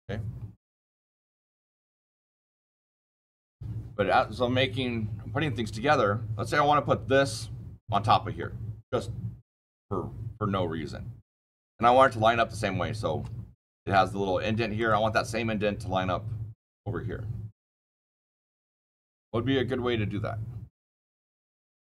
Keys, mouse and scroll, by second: 1.2 click, 1.5-1.8 scroll down 7, 2.0-2.8 shift+middle click, 2.3 middle click, 3.1 shift+middle click, 3.1 shift+middle click, 3.2 shift+middle click, 6.9-7.9 shift+scroll, 7.9-11.9 shift+scroll, 11.9-12.9 shift+scroll, 12.5 shift+middle click, 12.9 shift+middle click, 14.7 click, 14.7 click, 14.9 click, 17.6 click, 18.0 scroll down 2, 18.3 click.